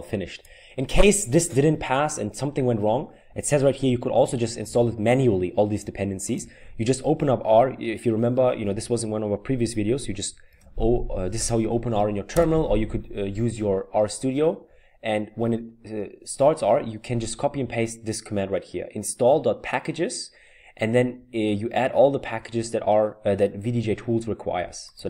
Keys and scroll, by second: 10.5 typing, 12.3 Return.